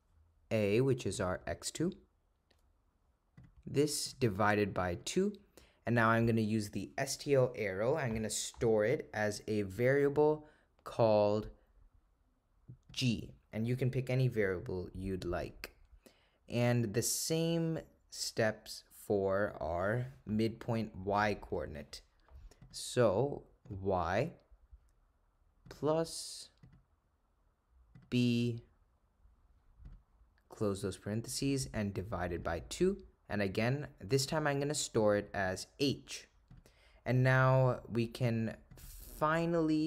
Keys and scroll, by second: 3.4 ), 4.1 /, 5.0 2, 15.5 Return, 20.8 (, 23.7 1, 29.9 ), 31.6 /, 32.4 2, 35.5 ^, 36.6 Return, 38.8 Right.